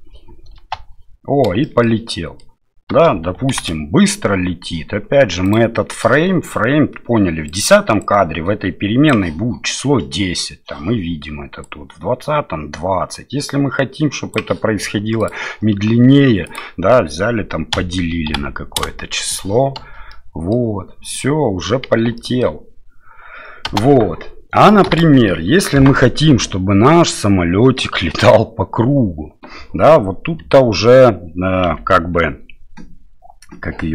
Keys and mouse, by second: 0.5 space, 1.6 shift+middle click, 2.1 middle click, 3.5 shift+Left, 5.6-7.7 drag, 8.0-9.1 drag, 11.6-14.3 drag, 15.3-19.4 drag, 19.8 space, 20.1 middle click, 21.1 middle click, 22.2 middle click, 23.7 space, 24.8 shift+Left, 26.0 middle click, 27.7 middle click, 30.5 KP_Divide, 31.7 KP_7.